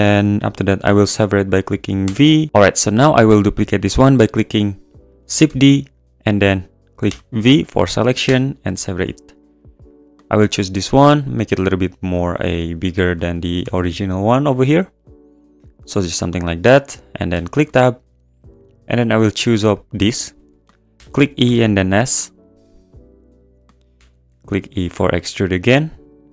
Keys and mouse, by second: 2.0 p, 5.5 shift+d, 6.0 click, 7.1 p, 9.0 Tab, 9.9 click, 10.4 s, 11.8 click, 12.9 click, 13.6 g, 13.7 z, 15.9 click, 17.3 Tab, 19.2 click, 19.7 alt+click, 20.9 e, 21.0 click, 21.4 s, 23.7 click, 24.0 e, 24.0 click, 24.3 g, 24.4 z.